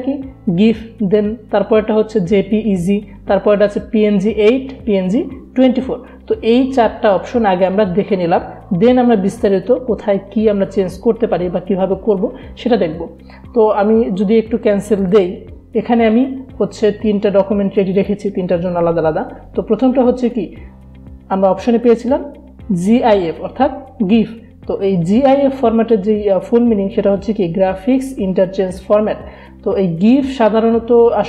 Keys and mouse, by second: 9.5 click, 14.9 click, 18.0 click.